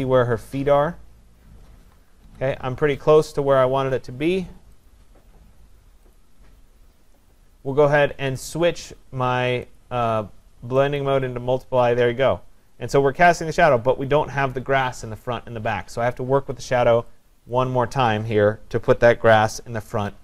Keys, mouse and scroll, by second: 2.3 Right, 2.7 Right, 4.9 click, 6.1 click, 9.8 click, 11.3 click, 17.6 click.